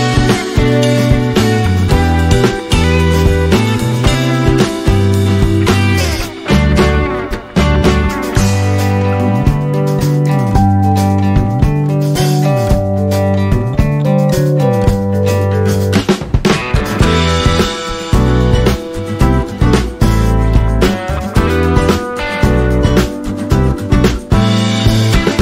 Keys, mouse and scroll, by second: 1.2 click, 1.5-2.0 scroll down 1, 3.6 alt+click, 4.5 click, 6.3 click, 7.0 alt+scroll down 1, 8.0 scroll down 1, 8.7 ctrl+d, 9.8 ctrl+d, 11.6 click, 12.7 alt+scroll down 1, 13.2 alt+scroll up 1, 13.7 space, 13.8 click, 14.0 space, 14.9 click, 18.5 click, 21.4 click, 23.5 alt+scroll up 1, 24.7 click.